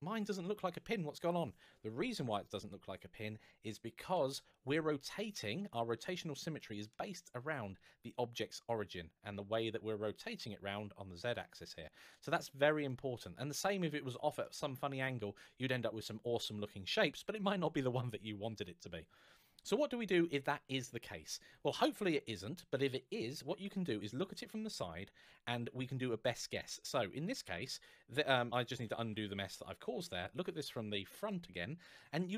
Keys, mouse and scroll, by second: 3.9 Tab, 4.8 middle click, 12.7 middle click, 21.0 Tab, 23.3 KP_1, 27.4 middle click, 28.2 ctrl+z, 29.9 KP_1, 31.1 shift+middle click.